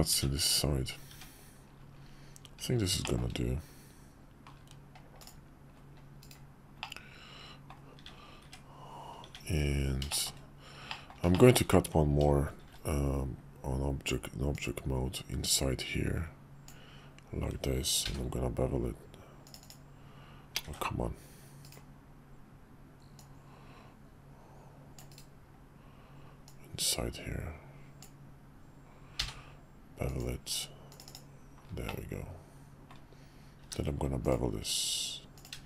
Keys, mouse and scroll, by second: 0.1 `, 1.1 `, 3.0 shift+middle click, 5.2-6.4 drag, 6.8 middle click, 8.4 `, 9.2 `, 10.1 shift+middle drag, 10.9 middle click, 11.3 shift+middle click, 12.6 shift+v, 14.6-19.7 drag, 23.1-25.2 drag, 26.4-30.3 drag, 31.0 click, 31.9-32.9 middle drag, 33.6 q.